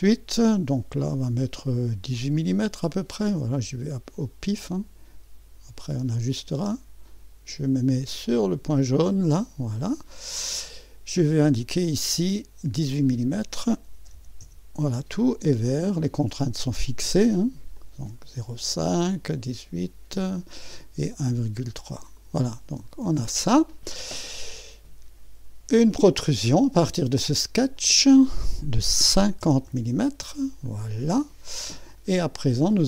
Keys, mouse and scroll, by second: 3.9 click, 6.0 click, 9.1 click, 9.9 click, 9.9-11.3 right drag, 11.7 click, 12.9 click, 14.1 8, 14.4 Return, 15.7 middle click, 16.4-17.7 scroll up 1, 17.7-19.2 drag, 21.3-22.3 drag, 23.1 click, 27.7 click, 29.4 0, 29.6 Return, 31.0-32.5 middle drag, 31.5 scroll down 1, 32.5-32.8 scroll up 1.